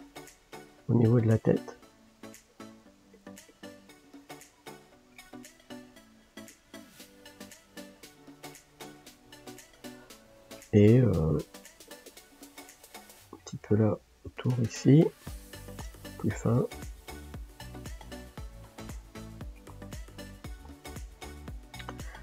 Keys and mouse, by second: 3.2 click, 3.5 click, 4.2-6.0 middle drag, 6.0-7.1 drag, 8.5 middle click, 8.9 click, 9.5-11.1 middle drag, 11.1-13.4 drag, 13.4 middle click, 14.2-15.2 drag, 15.2 middle click, 16.0 f, 17.0-18.6 drag, 18.6-22.0 ctrl+middle drag, 22.0 n.